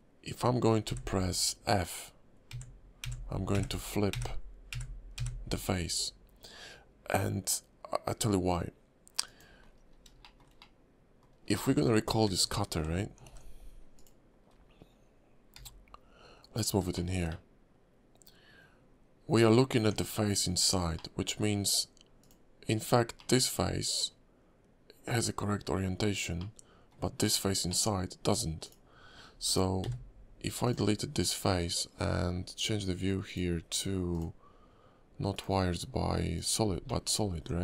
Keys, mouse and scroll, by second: 9.6-9.9 scroll down 7, 10.2 shift+middle click, 10.6 middle click, 11.4 scroll up 2, 12.2 Tab, 13.3 alt+h, 13.9 click, 14.4-15.3 scroll up 2, 15.5 g, 16.9 shift+middle click, 17.3 middle click, 19.8 Tab, 20.9 middle click, 22.2 click, 22.7 scroll up 2, 23.2 middle click, 26.4 middle click, 27.3-27.7 scroll down 4, 27.7 middle click, 28.6 click, 29.8 x, 33.2 click, 34.1 click, 35.3 click, 36.8 middle click, 37.2 scroll up 2, 37.4 Tab.